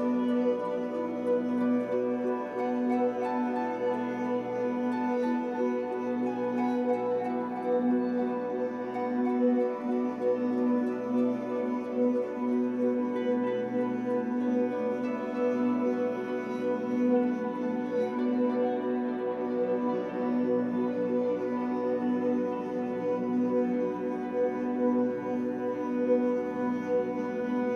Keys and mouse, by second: 0.7 Down, 0.9 Down, 1.0 Down, 1.2 Down, 1.4 Down, 1.6 Down, 1.7 Down, 2.5 Return, 3.8-5.6 alt+drag, 5.7-7.6 alt+drag, 7.8 typing, 8.5 ctrl+p, 9.6-10.3 typing, 10.9-11.3 alt+drag, 11.6 click, 12.3 shift+click, 13.4 ctrl+p, 14.4 Return, 15.3-16.4 alt+drag, 16.9 alt+click, 17.8 shift+click, 18.2 click, 18.8 ctrl+p, 20.0 Return, 20.8-22.5 alt+drag, 22.5 click, 23.7 shift+click, 24.1 shift+click, 25.1 ctrl+p, 26.1 Return, 26.9-27.7 alt+drag.